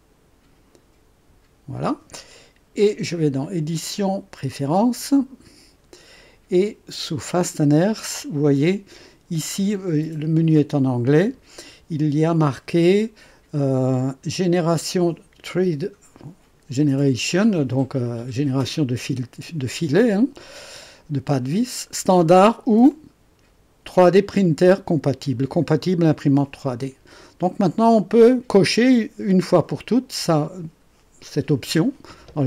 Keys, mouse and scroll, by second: 3.4 click, 4.9 click, 7.3 click, 22.9 click, 28.0 click.